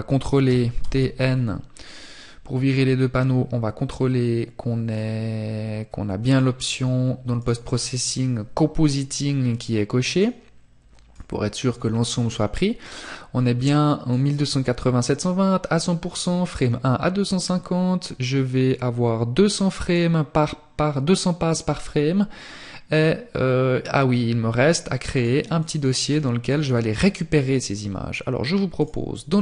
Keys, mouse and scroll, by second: 0.1 scroll up 1, 1.1 scroll up 1, 5.9-7.0 scroll down 1.